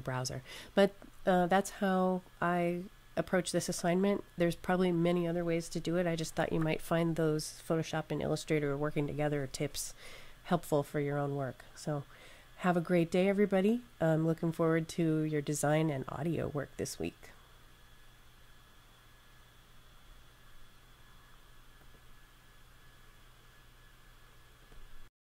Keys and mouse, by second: 21.7 click, 24.5 click.